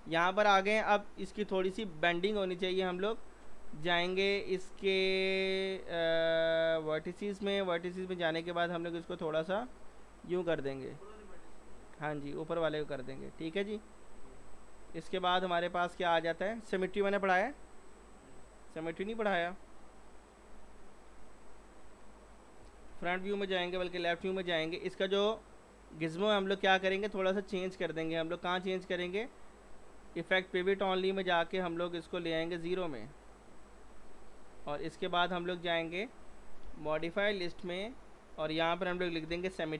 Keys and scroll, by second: 22.6-23.8 typing, 36.6 p, 39.3 typing.